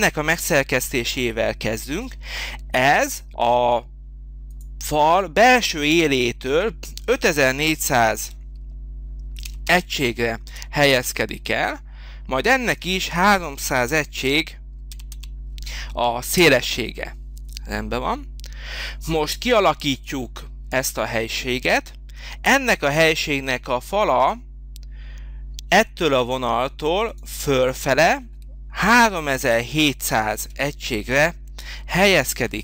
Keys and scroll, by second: 7.9 5, 8.2 4, 9.4 0, 10.7 Return, 11.4 Return, 13.9 3, 15.1 0, 16.5 Return, 30.5 3, 31.1 7, 32.1 0.